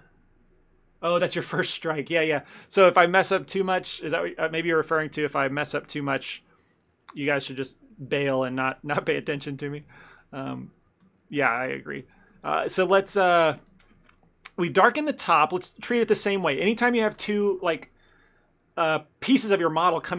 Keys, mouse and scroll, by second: 3.2 middle click, 3.8 middle click, 4.8 middle click, 5.1-5.6 ctrl+middle click, 5.4 middle click, 5.7 middle click, 6.2 ctrl+middle click, 9.5 ctrl+middle click, 9.8 middle click, 10.0 ctrl+middle click, 10.3 middle click, 10.6 ctrl+middle click, 11.0 f, 11.3 middle click, 11.6 middle click, 11.7 ctrl+middle click, 11.8 ctrl+middle click, 12.1 f, 12.4 ctrl+middle click, 12.7 shift+middle click, 12.7 shift+middle click, 12.9 middle click, 13.4 shift+f, 14.1 ctrl+middle click, 14.3 middle click, 15.1 middle click, 15.3 shift+middle click, 15.3 ctrl+middle click, 15.6 ctrl+middle click, 15.9 f, 16.3 ctrl+middle click, 16.5 middle click.